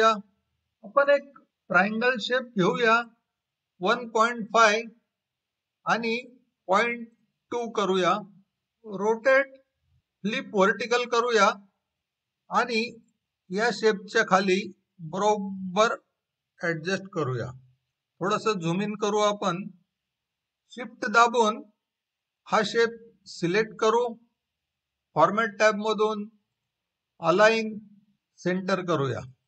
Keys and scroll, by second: 3.5-4.8 typing, 6.7-7.1 typing, 8.3 Return.